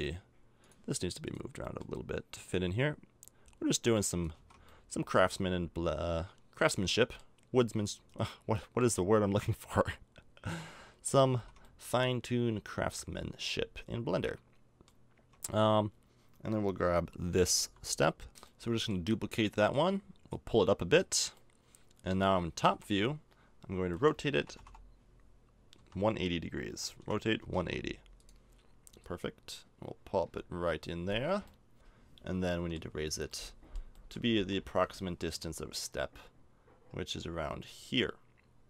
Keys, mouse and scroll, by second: 1.2 right click, 1.6-4.2 middle drag, 4.3 a, 4.4 Tab, 7.6 Tab, 8.1 right click, 8.5 middle click, 9.7-10.8 middle drag, 11.3 a, 11.4 Tab, 14.2 middle click, 15.2 Tab, 17.6 l, 18.3 g, 20.3-21.6 drag, 21.9 middle click, 22.7 KP_7, 24.0 r, 26.7 r, 29.0-30.6 drag, 31.5 middle click, 34.4 KP_1.